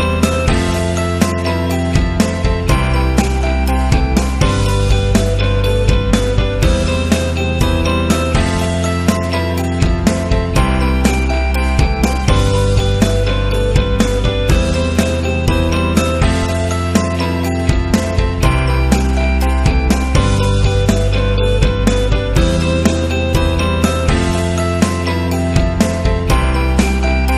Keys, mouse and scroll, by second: 0.2 click, 0.9 click, 6.3 right click, 6.5 right click, 9.7 click, 11.0 click, 12.4-13.8 drag, 15.1 click, 15.8 click, 17.7 click, 18.0 click, 18.5 space, 18.7 click, 19.0 space, 22.4 alt+scroll up 1, 23.6 m, 25.9 click.